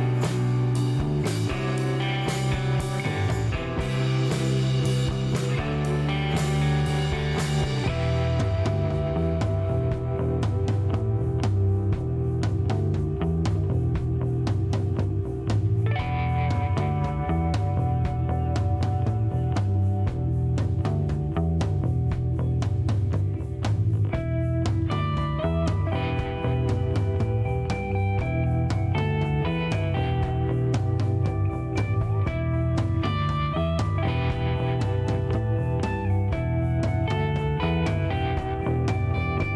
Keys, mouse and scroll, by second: 0.2 click, 1.0 middle click, 1.6 shift+right click, 4.9 click, 7.2 click, 8.3 scroll up 2, 10.5 click, 13.2 click, 14.3 click, 14.6 right click, 15.1 click, 16.6 click, 18.5 click, 19.8 click, 21.6 click, 23.3-24.2 typing, 24.9 click, 26.1 middle click, 28.0-30.4 drag, 31.3 click, 33.4 click, 34.8-35.2 scroll up 2, 35.6 scroll up 4, 36.8 scroll down 2, 37.9 click, 38.6 scroll down 2, 38.9 shift+right click.